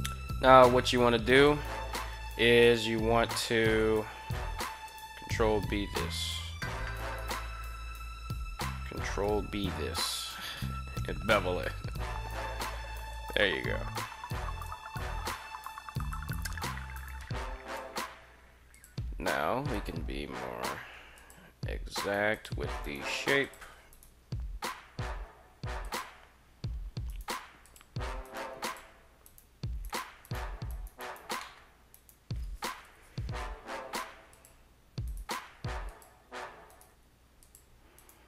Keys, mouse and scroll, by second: 0.5 g, 1.1 click, 2.4 KP_3, 3.6 shift+z, 4.5 ctrl+b, 6.7 right click, 9.0 ctrl+b, 12.8 click, 14.4 g, 15.8 click, 16.7 right click, 17.5 g, 18.5 click, 19.5 right click, 19.9 g, 20.6 q, 21.0 drag, 21.7 right click, 21.9 g, 22.1 click, 22.5 right click, 22.9 g, 23.2 drag, 23.7 click, 23.7 right click, 24.2 g, 25.5 click, 26.8 right click, 27.4 click, 27.4 g, 28.0 right click, 28.4 click, 28.4 g, 29.0 right click, 29.6 g, 29.6 right click, 30.0 right click, 30.4 right click, 30.8 right click, 31.2 middle click, 31.7 right click, 32.6 KP_3, 33.5 g, 34.1 click, 34.7 right click, 35.0 g, 35.7 drag, 36.4 right click, 36.7 g, 37.2 drag, 37.7 right click, 38.0 g.